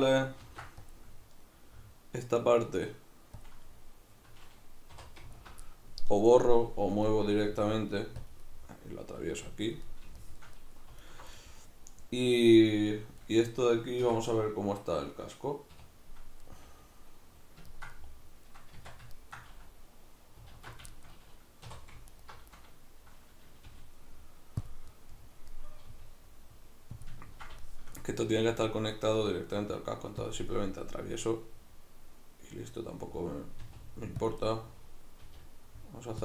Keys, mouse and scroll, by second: 0.5 ctrl+r, 3.5 click, 5.0 3, 5.3 alt+right click, 5.7-8.3 middle drag, 7.5 g, 8.3 click, 8.5-9.6 middle drag, 9.2 g, 9.6 click, 9.9-11.1 middle drag, 11.1 alt+right click, 11.4-22.1 middle drag, 14.1 Tab, 15.7 \, 18.8 Tab, 20.5 alt+q, 21.7 3, 22.1 alt+right click, 23.6 g, 24.7 click, 24.9-27.0 middle drag, 25.8 g, 27.0 click, 27.2-30.3 ctrl+middle drag, 29.2 g, 30.3 click, 30.4-34.3 middle drag, 33.7 r, 34.3 click, 34.4-36.2 middle drag, 35.3 g.